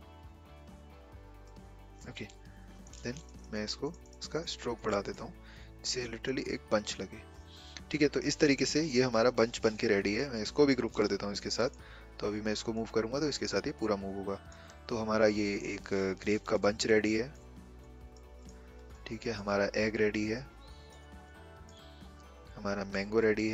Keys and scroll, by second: 11.1 ctrl+g.